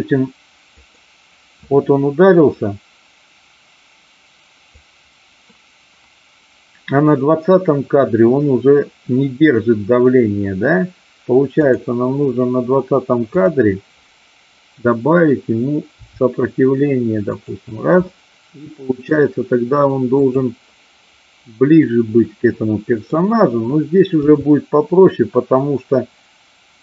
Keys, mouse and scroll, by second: 0.6 click, 2.5 click, 11.5 click, 13.3-14.3 drag, 15.9 r, 18.2-19.2 middle drag, 21.8-23.2 middle drag, 24.3 g.